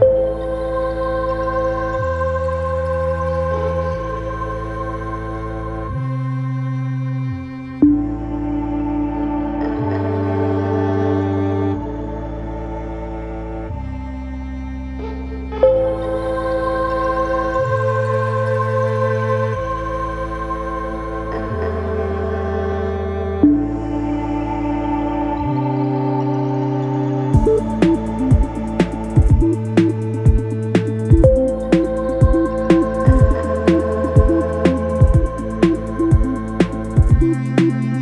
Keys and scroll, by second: 1.4 4, 3.1 3, 29.2 F9, 35.9 3.